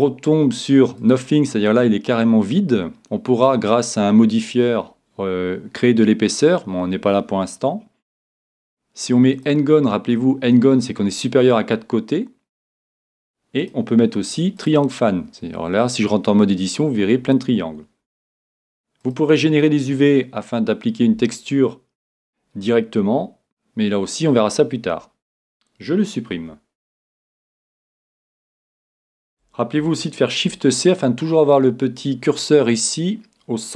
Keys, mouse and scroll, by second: 1.8-3.5 middle drag, 8.5-10.2 drag, 10.2-11.8 middle drag, 11.8-12.6 scroll up 1, 12.6 middle click, 13.6-15.5 drag, 19.0-20.9 drag, 26.4 x, 30.5 shift+c.